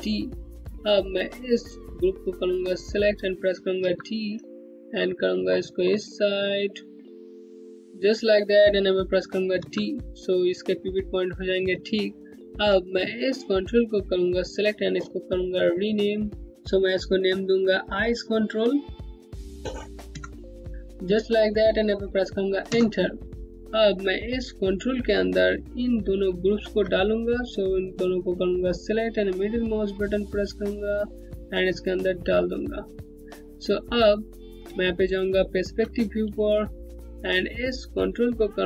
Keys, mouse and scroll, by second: 1.9 click, 3.4 d, 4.2-4.9 scroll up 1, 5.1 alt+middle click, 5.2 Home, 5.6 scroll up 1, 6.7 click, 7.4-9.1 scroll up 1, 9.2 d, 11.3 scroll down 1, 12.9 click, 18.4 click, 19.7 BackSpace, 22.3 Return, 23.4 click, 25.5 click, 26.2 ctrl+click, 28.2 middle click, 28.2-29.0 typing, 33.4 click, 34.3-38.1 typing, 35.6 scroll down 1, 35.9 alt+click, 36.5-37.4 scroll up 1, 37.4 click.